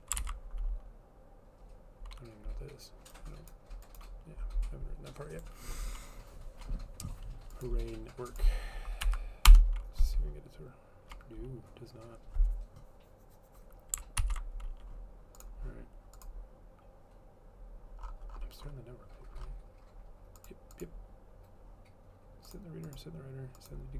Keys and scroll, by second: 0.0-0.1 typing, 0.3 ctrl+s, 9.6 Return, 14.4 ctrl+c.